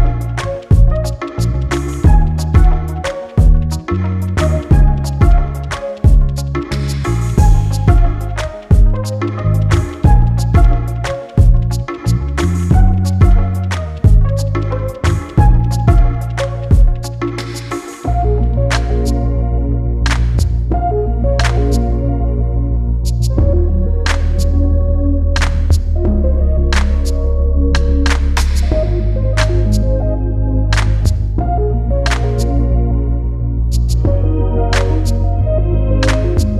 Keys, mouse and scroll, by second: 1.6 click, 2.4 click, 4.4 click, 6.0 scroll down 1, 6.4 click, 7.6 click, 9.0 click, 13.5 click, 14.6 click, 15.6 click, 16.7 click, 21.0 click, 21.5 right click, 22.3 click, 25.1 click, 26.8 right click, 30.5 click, 34.9 click.